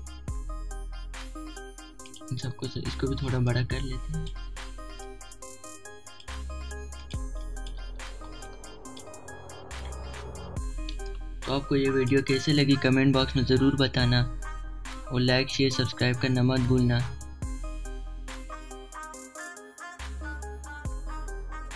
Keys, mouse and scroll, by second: 0.0-1.4 alt+shift+drag, 2.9 click, 6.0-9.5 alt+shift+drag, 9.5 typing, 9.9 click, 10.6 alt+scroll up 1, 11.1 space, 11.2 click, 13.0 alt+scroll up 1, 13.4 space, 13.5 click, 14.0 space.